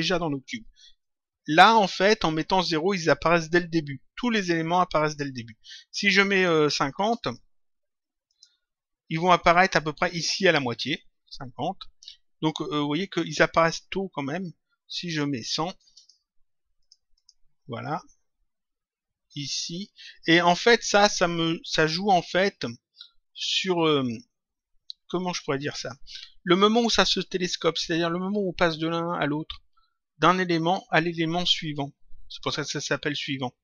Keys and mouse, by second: 6.2 click, 8.3 click, 14.9 click, 23.2 click, 25.5 click.